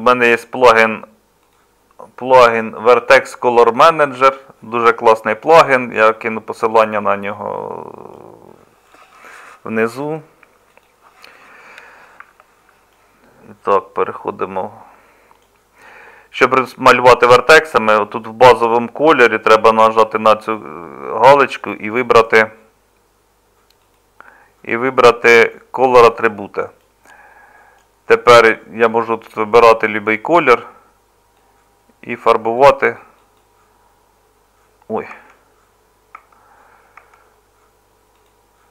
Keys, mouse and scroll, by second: 35.1 Tab, 36.2 Tab.